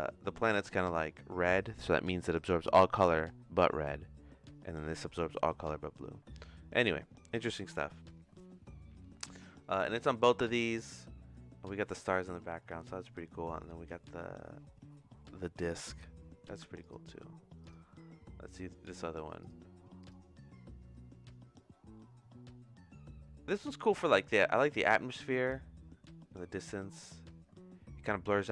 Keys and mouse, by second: 16.8 click, 18.4 click, 19.4 click, 21.9 middle click.